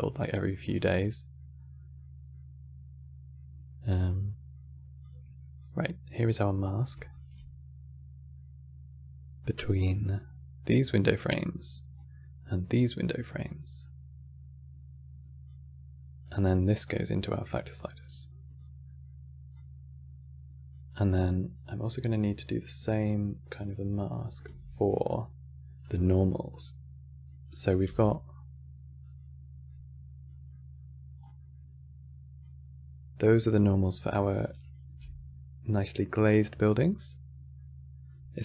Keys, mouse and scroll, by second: 0.8-1.3 middle drag, 1.3-1.7 scroll up 1, 1.7 middle click, 2.3-2.7 scroll up 1, 2.7-4.7 middle drag, 4.7 click, 5.3-6.8 drag, 8.1-11.6 middle drag, 11.6 click, 15.2 click, 16.5 click, 17.7 click, 18.6-19.2 middle drag, 19.2-22.2 drag, 23.3 click, 23.6 middle click, 24.3 shift+d, 26.3 click, 27.2 click, 27.5 g, 29.4 click, 30.2 middle click, 30.9 scroll down 3, 31.1-32.1 middle drag, 32.1 click, 33.5 middle click, 33.8 scroll up 8, 34.3 ctrl+shift+click, 35.7-38.4 middle drag.